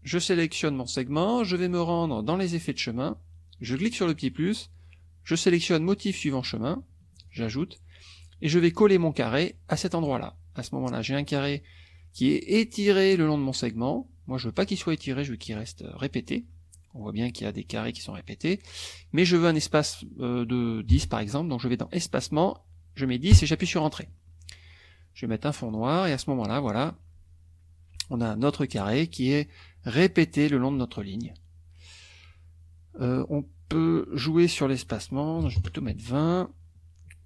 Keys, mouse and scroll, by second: 0.5 click, 1.7 click, 2.5 click, 3.8 click, 5.9 scroll down 1, 7.2 click, 10.0 click, 14.6-16.2 drag, 19.3 click, 20.9 KP_1, 23.3 Return, 25.7 click, 26.3 click, 34.6 click, 35.4 KP_2, 35.6 KP_Enter.